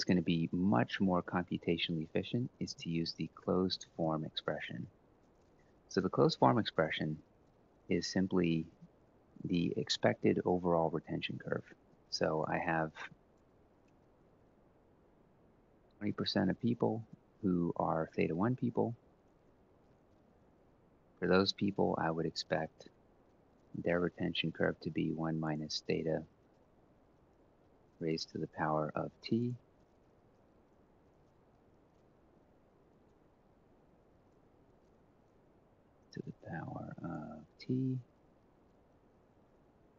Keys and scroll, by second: 2.1-4.3 typing, 5.0 Return, 5.8 Right, 8.0-8.7 typing, 15.5 F4, 18.9-20.9 typing, 26.3 F4, 27.6 typing, 30.0 ctrl+Up, 30.8 ctrl+Down, 32.8 typing, 33.0 F2, 35.2 ^.